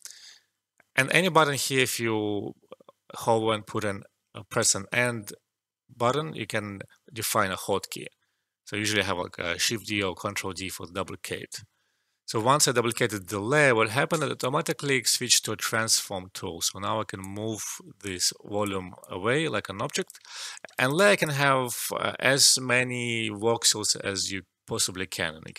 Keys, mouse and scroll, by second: 17.2-19.0 drag, 19.0 alt+click, 20.2 alt+middle click, 20.7 alt+right click, 20.9 alt+click.